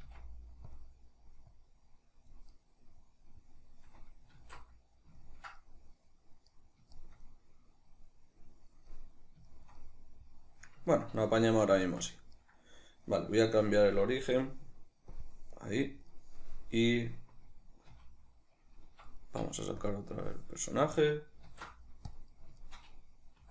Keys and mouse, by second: 0.1 f, 0.8 click, 1.5-2.5 drag, 2.5-13.9 middle drag, 4.4 alt+q, 11.9 Tab, 13.9-15.6 drag, 15.6-19.9 middle drag, 17.8 q, 19.0 Escape, 19.9 click, 20.6 right click, 21.4 alt+q, 22.6-23.5 shift+middle drag.